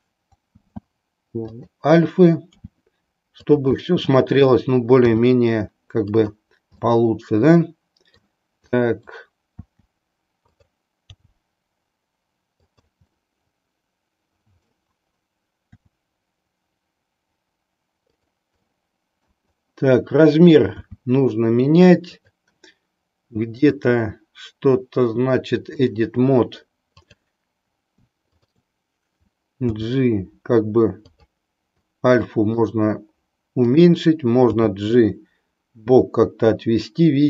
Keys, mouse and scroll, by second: 0.6 shift+d, 1.6 click, 2.6 r, 3.8-4.6 middle drag, 5.1 r, 6.8-8.3 middle drag, 8.7-9.2 middle drag, 9.6 r, 11.2 g, 12.7 click, 13.2-14.8 middle drag, 15.7 r, 18.1 click, 18.7-19.3 middle drag, 20.6 s, 22.2 click, 23.6-26.0 drag, 27.0 click, 28.2 shift+click, 29.7 g, 32.0 middle click, 34.7 g.